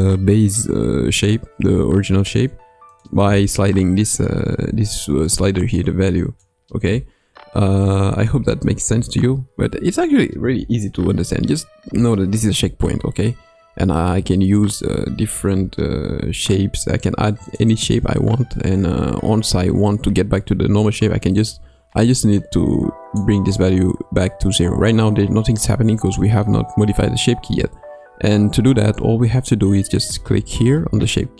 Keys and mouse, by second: 17.9-28.3 drag, 30.0-31.3 drag.